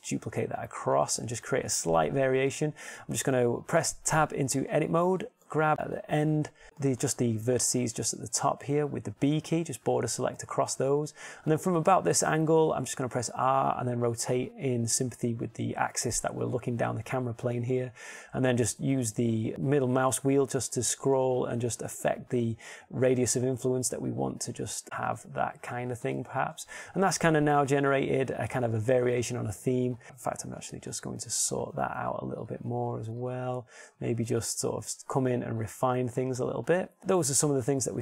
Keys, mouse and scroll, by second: 1.4 shift+d, 5.2 Tab, 5.8 a, 9.5 b, 10.2 click, 14.8 r, 29.0 Tab, 31.6 Tab, 33.5 r, 34.2 g, 34.8 click, 35.4 r, 36.0 click, 37.0 g.